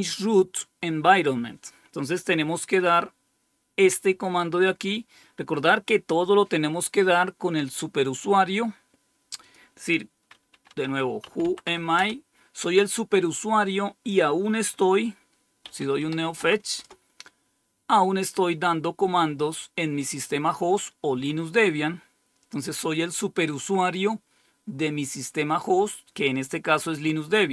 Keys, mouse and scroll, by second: 9.4 click, 10.2-12.1 typing, 15.5-16.6 typing, 16.7 Return.